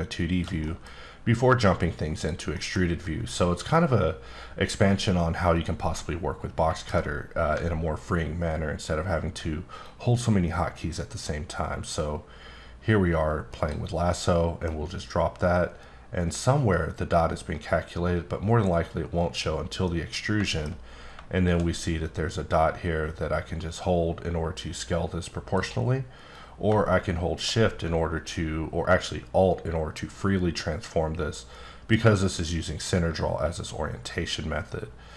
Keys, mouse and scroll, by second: 0.6 middle click, 1.4 click, 2.5 middle click, 5.5 click, 6.0 middle click, 7.7-9.0 alt+scroll up 3, 9.0-9.8 alt+scroll down 2, 9.8-13.5 drag, 13.5 right click, 14.1 middle click, 18.7 click, 19.9 middle click, 22.0 click, 26.3 click.